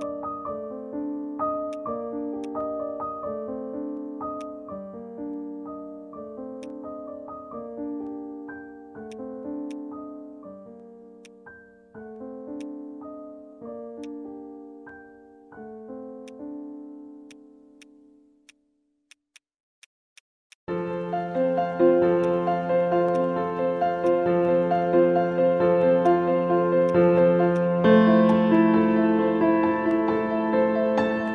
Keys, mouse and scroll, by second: 1.7 alt+click, 4.4 alt+click, 6.3-6.6 scroll up 1, 6.6 alt+click, 8.2 alt+middle click, 8.6 alt+middle click, 8.8 scroll down 1, 9.1 alt+click, 9.4 alt+middle click, 10.1 alt+middle click, 13.1 Delete, 13.5 scroll up 1, 13.6-14.7 scroll down 1, 15.1 scroll up 1, 15.2-16.1 scroll down 1, 17.3 right click, 20.8 scroll up 1, 21.3-22.3 scroll down 1, 22.6 scroll up 1, 23.1 alt+click, 23.5 alt+middle click, 23.8 scroll down 1, 24.0 alt+click, 24.5 scroll down 1.